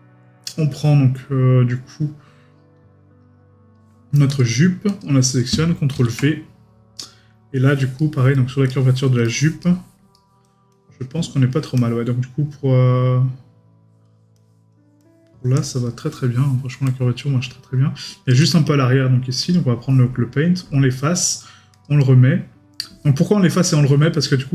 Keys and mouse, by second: 8.0 right click, 9.2 middle click, 16.2 middle click.